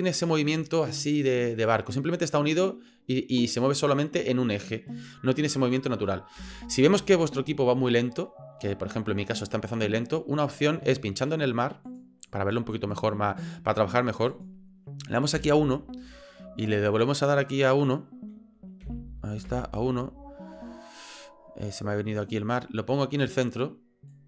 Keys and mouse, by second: 6.5 space, 9.4 click, 11.9 click, 14.5-16.7 drag, 16.9-19.8 drag, 22.2-23.4 drag, 24.1-24.2 drag.